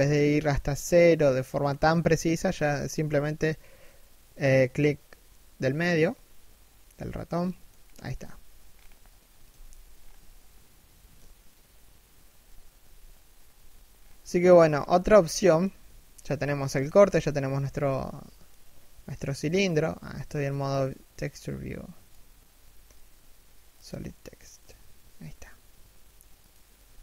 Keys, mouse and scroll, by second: 7.3-7.9 scroll up 1, 8.2-9.5 scroll up 1, 9.5-9.9 scroll down 1, 9.9 shift+middle click, 12.3 a, 13.5-13.9 scroll down 1, 13.9 shift+middle click, 14.2 scroll up 1, 14.7 shift+middle click, 16.8 middle click, 17.1 z, 17.3 middle click, 18.9 middle click, 26.4 1, 26.8 z.